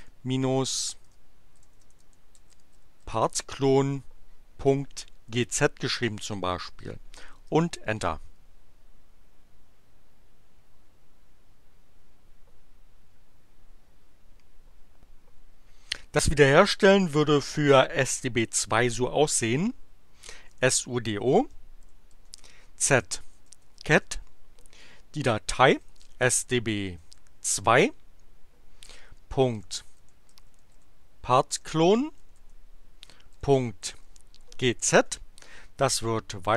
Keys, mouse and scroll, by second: 1.0-3.6 typing, 4.7 ., 5.2 g, 5.5 z, 7.4 Return, 20.1-24.0 typing, 25.6-27.0 typing, 29.0-35.0 typing, 36.1 alt+<.